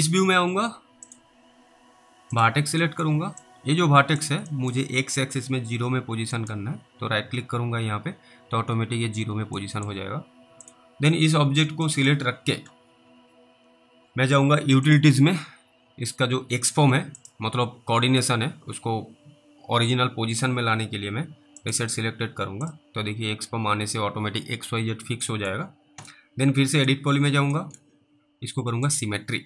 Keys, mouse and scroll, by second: 0.0 middle click, 1.1 click, 3.1 middle click, 3.7 click, 4.8 middle click, 6.5 right click, 9.9 middle click, 10.7 click, 11.4-11.9 scroll down 1, 12.2 middle click, 14.9 click, 21.6 click, 25.6 middle click, 26.8 click, 27.9 middle click, 28.9 click.